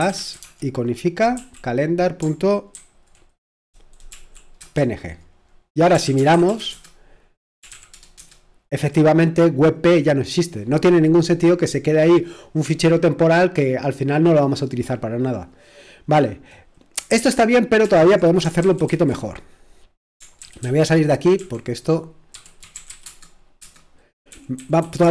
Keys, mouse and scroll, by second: 0.0-8.7 typing, 17.2 super+h, 17.8 super+l, 18.6 ctrl+w, 20.4 c, 24.3 ctrl+w, 25.0 a.